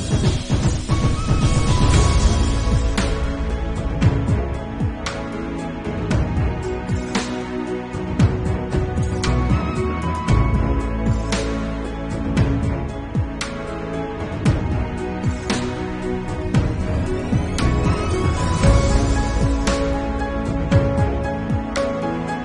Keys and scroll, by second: 0.0 ], 1.3 ctrl+z, 4.2 [, 9.8 ctrl+alt+z, 10.1 ctrl+s, 10.7 [, 11.3 ], 13.0 ], 13.5 [, 15.8 ctrl+s, 16.7 ], 18.8-21.5 typing.